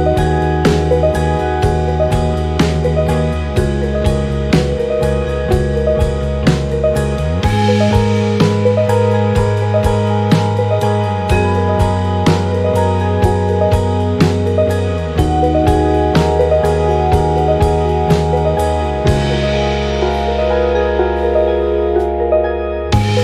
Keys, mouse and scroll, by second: 0.1 click, 0.8 click, 1.3 click, 1.8 click, 4.3 click, 5.7 click, 7.4 click, 8.6 ctrl+d, 11.2 ctrl+shift+9, 12.0 ctrl+shift+9, 13.0 ctrl+shift+9, 15.0 click, 15.7-16.0 ctrl+scroll down 2, 17.5-19.6 drag, 19.8 shift+click, 21.0 shift+click, 21.4 shift+click, 22.4 ctrl+shift+KP_Subtract.